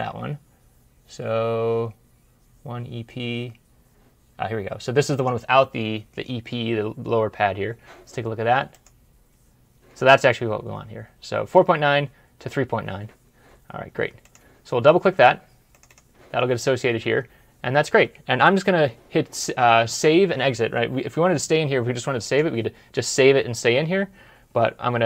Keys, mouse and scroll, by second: 15.7 double click.